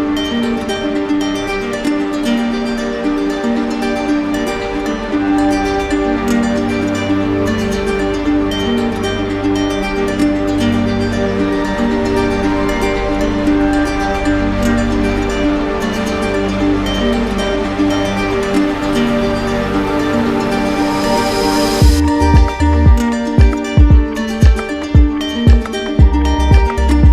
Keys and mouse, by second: 0.5 click, 0.8-2.5 right drag, 3.7 click, 5.9 click, 7.1 click, 7.5 shift+right click, 9.4 right click, 10.1 right click, 10.5-12.0 right drag, 13.9-15.0 right drag, 16.8-17.9 drag, 20.7-21.8 drag, 22.7 right click, 23.4 shift+right click, 25.7 click, 26.7 right click.